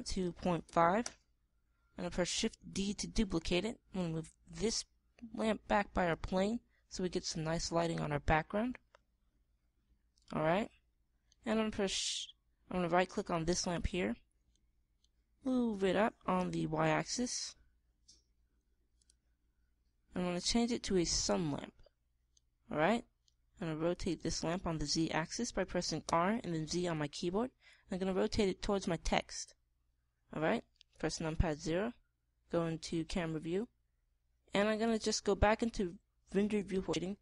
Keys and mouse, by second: 3.2 shift+d, 4.5-6.3 drag, 7.0-8.8 middle drag, 9.3 middle click, 10.9-12.5 middle drag, 12.5-14.4 right drag, 15.0-16.8 middle drag, 16.8 g, 19.6-21.4 drag, 21.7-23.0 drag, 26.6 r, 32.1 KP_0.